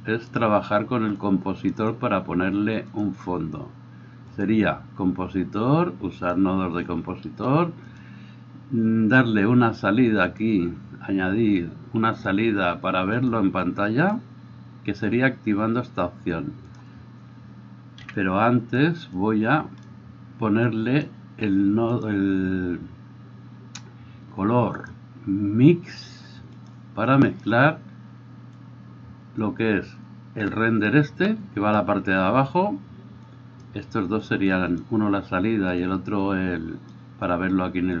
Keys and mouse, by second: 6.4-10.9 middle drag, 10.9-14.1 drag, 14.1-16.6 middle drag, 16.6 click, 16.8-19.1 middle drag, 18.0 n, 19.1-27.4 drag, 27.4-28.6 middle drag, 28.6-33.7 drag, 33.7 middle click, 34.3-38.0 drag.